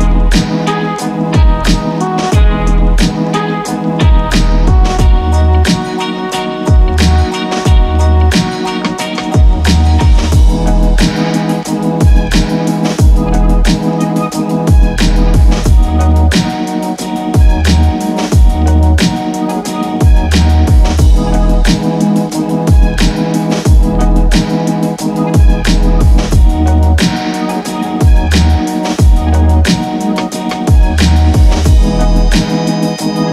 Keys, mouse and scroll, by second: 0.0 click, 1.1 right click, 2.9 click, 9.8 right click, 10.8 click, 12.3-14.4 typing, 14.8 Return, 16.7 click, 17.8-18.9 scroll up 1, 18.9 click, 19.6 ctrl+space, 19.9-21.0 typing, 22.4 Return, 29.4 click.